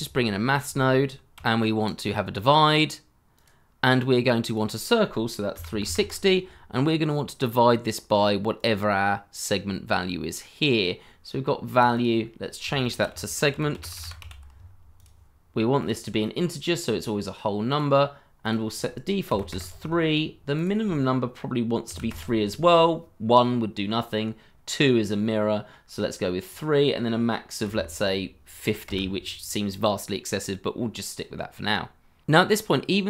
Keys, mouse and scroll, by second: 0.0-1.0 typing, 5.6 3, 5.7 6, 5.8 0, 5.9 Return, 11.9 double click, 12.9-14.7 typing, 19.3 3, 19.5 Return, 21.9 3, 22.1 Return, 27.6 5, 27.7 0, 28.8 Return, 32.5 shift+middle click.